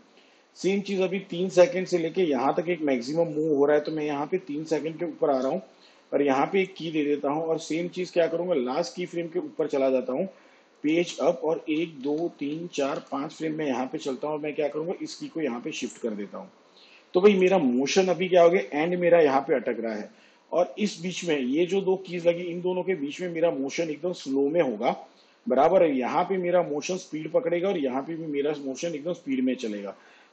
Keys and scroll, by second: 10.6 shift+Page_Up, 11.5 ctrl+Left.